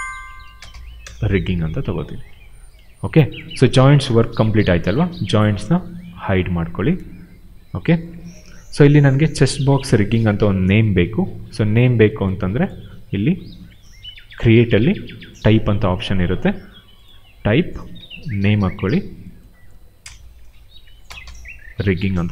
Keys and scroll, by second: 0.0-1.1 typing, 4.4 q, 6.0 ctrl+h, 17.9 ctrl+a, 18.2 ctrl+v, 19.9-21.7 typing.